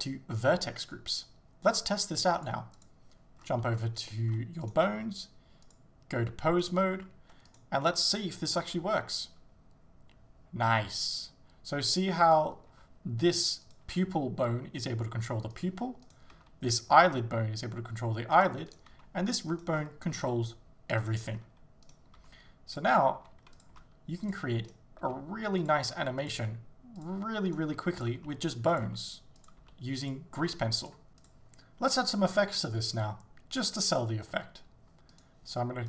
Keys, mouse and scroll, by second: 3.4 scroll down 2, 3.7-4.1 scroll up 2, 4.1 shift+middle click, 4.7 right click, 6.7 click, 7.5 right click, 8.4-8.8 scroll up 1, 8.8 g, 12.4 right click, 12.7 g, 13.8 right click, 14.1 s, 16.1 right click, 16.4 g, 18.7 right click, 18.9 g, 19.7 right click, 19.8 scroll down 1, 20.2 g, 21.1 right click, 21.3 scroll up 1, 21.9 right click, 22.2 s, 23.2 g, 23.7 click, 23.7 s, 24.3 click, 24.7 right click, 25.1 g, 25.7 click, 25.9 r, 26.3 click, 26.4 g, 27.5 right click, 27.7-30.4 typing, 28.8 click, 29.5 click, 30.1 click, 31.3 click.